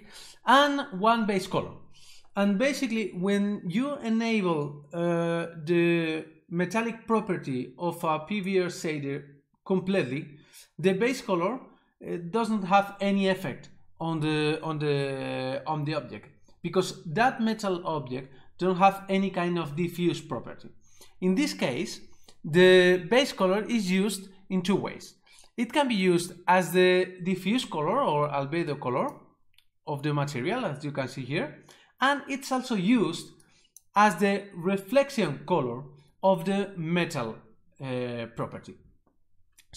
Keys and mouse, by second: 28.8 click, 33.5 click.